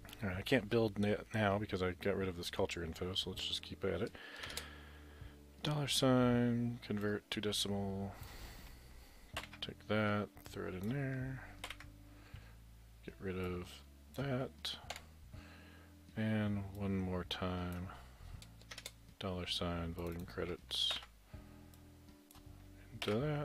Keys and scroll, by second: 4.5 shift+4, 9.4 ctrl+x, 11.7 ctrl+v, 15.0 Delete, 17.7 Delete, 18.8 shift+4, 20.9 ctrl+x, 23.1 ctrl+v.